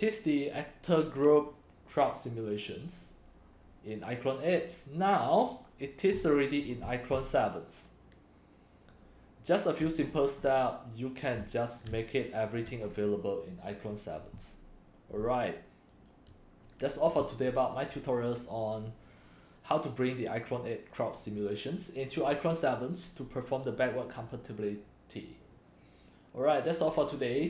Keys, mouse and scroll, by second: 2.4 right click, 3.0-4.8 drag, 5.6 scroll, 6.1 middle click, 6.2-6.8 scroll, 6.6 middle click, 6.8-9.8 typing, 7.1-8.1 drag, 10.0-10.4 click, 10.0 click, 10.4 click, 10.4 click, 11.4-13.0 typing, 12.5 click, 13.0 scroll down 5, 16.0 scroll, 16.4 right click, 16.5-21.1 drag, 22.4-27.4 drag.